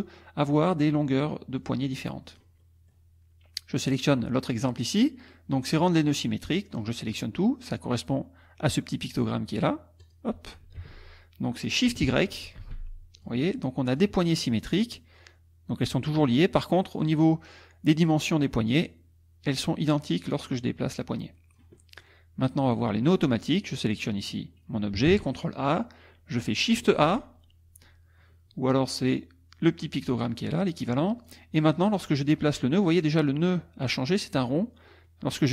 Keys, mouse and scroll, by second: 1.6-2.6 drag, 2.6 middle click, 3.9 click, 4.3 middle click, 5.8 click, 10.0 click, 10.8 ctrl+z, 12.6 shift+y, 13.2 shift+click, 13.9 click, 15.2-22.2 drag, 23.1 click, 25.1 ctrl+a, 27.0 shift+a, 31.2 click, 31.8 click, 34.9-35.5 drag.